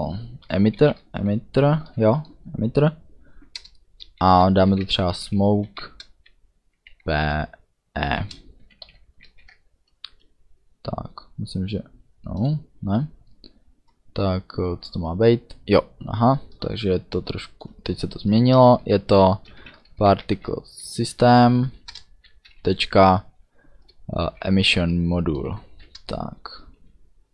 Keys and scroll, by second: 0.0-1.1 typing, 3.5 Return, 4.2-6.9 typing, 8.0 shift+e, 8.8 ;, 9.2 ctrl+s, 19.4-20.9 typing, 21.2 Down, 21.9 Return, 22.4 ., 24.0-25.2 typing, 25.7 Down.